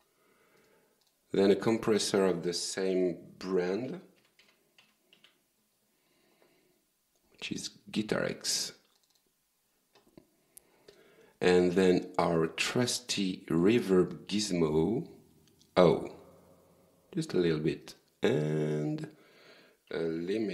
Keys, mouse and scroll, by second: 0.6 right click, 1.1 click, 3.9-5.2 typing, 9.0 click, 10.9 click, 12.7 click, 14.7 click, 16.5-17.3 scroll down 1, 17.9 right click, 18.5 click, 19.9-20.5 typing.